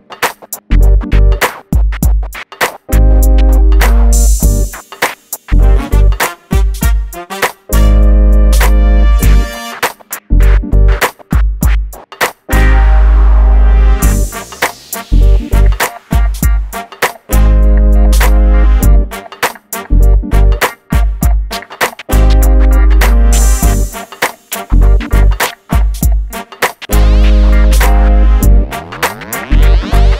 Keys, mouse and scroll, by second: 0.3 click, 2.3-2.7 scroll down 1, 3.1-3.9 scroll up 1, 4.9 shift+middle click, 5.4 scroll up 1, 5.8 shift+middle click, 6.3 scroll up 1, 9.7 click, 10.0 scroll down 1, 10.4 middle click, 10.9 scroll up 1, 11.2 middle click, 11.6-12.3 scroll up 1, 12.3 click, 18.0 scroll up 1, 18.3 scroll down 1, 20.0 Escape, 21.3 scroll down 1, 22.6 scroll down 1, 22.8 middle click, 23.7 click, 25.6-26.2 scroll up 1, 26.2 click, 27.9 shift+click, 28.1 scroll down 1, 28.2-29.6 middle drag, 29.6 click, 30.0 middle click.